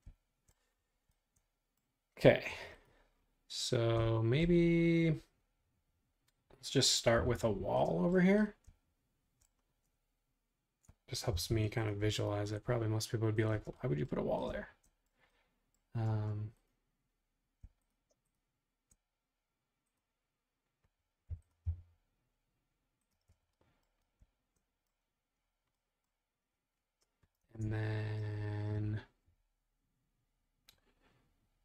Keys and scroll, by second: 7.2 r, 11.3 BackSpace, 13.5 space, 16.1 space, 21.3 m, 23.1 space, 27.4 super+Tab.